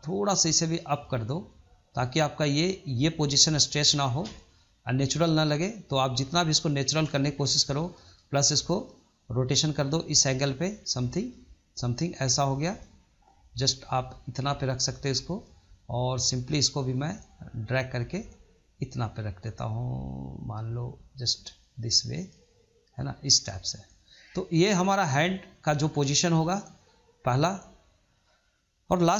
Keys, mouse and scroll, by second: 4.7-6.1 drag, 7.3 ctrl+z, 7.8-9.1 middle drag, 9.1 click, 11.2-13.1 middle drag, 13.1 click, 14.8-16.2 middle drag, 16.2 click, 18.2-23.7 drag, 23.7-26.7 middle drag, 28.0-28.9 shift+middle drag, 28.9 click.